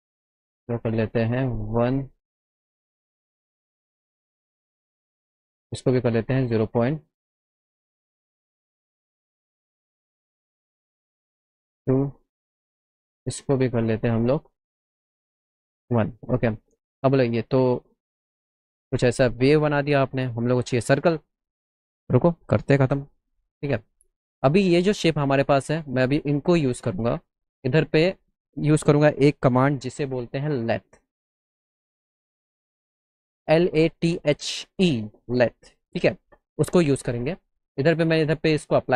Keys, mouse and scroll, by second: 0.5 click, 2.2 click, 4.4 click, 5.7 click, 6.9 click, 8.6 Left, 9.6 BackSpace, 11.3 KP_Enter, 12.7 click, 14.3 click, 16.5 middle click, 16.8 middle click, 17.1 middle click, 17.5 middle click, 18.5 click, 21.6 middle click, 22.2 middle click, 22.4 middle click, 23.9 alt+middle click, 25.7-27.2 alt+middle drag, 28.3 click, 32.0 middle click, 32.2 middle click.